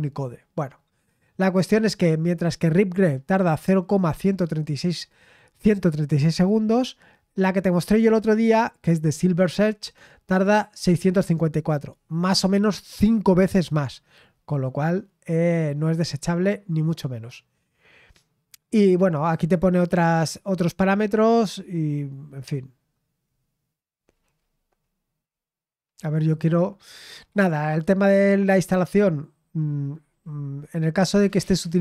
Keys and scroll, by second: 14.8-15.2 scroll down 1, 19.7-21.5 scroll down 2, 21.5-26.8 scroll down 1, 29.9-31.8 scroll down 2.